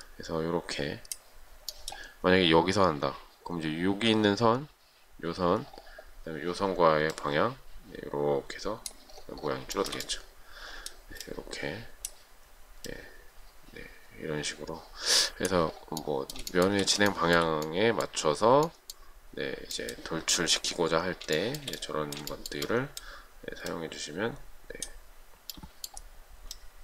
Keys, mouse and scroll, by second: 10.0 shift+middle click, 16.8 shift+middle click, 17.3 shift+middle click, 21.6 shift+middle click, 22.6 shift+middle click.